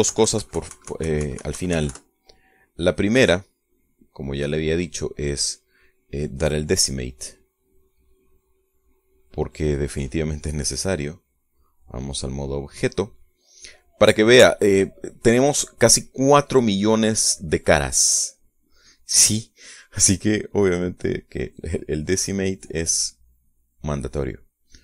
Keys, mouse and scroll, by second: 0.0 shift+click, 0.4 shift+middle click, 1.4 KP_Subtract, 3.6 middle click, 4.5-6.3 middle drag, 6.6-7.6 middle drag, 7.9 right click, 8.6 click, 12.0 click, 12.6 click, 19.6 right click, 22.7 click, 23.4 click.